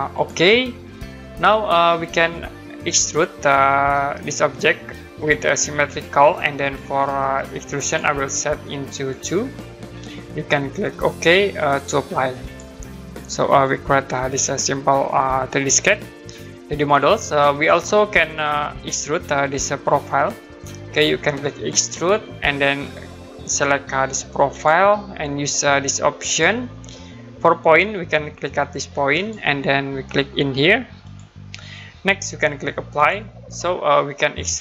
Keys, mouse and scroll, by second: 0.1 click, 7.8 click, 12.4 click, 21.7 click, 24.5 click, 26.3 click, 29.2 click, 31.0 click, 32.9 click.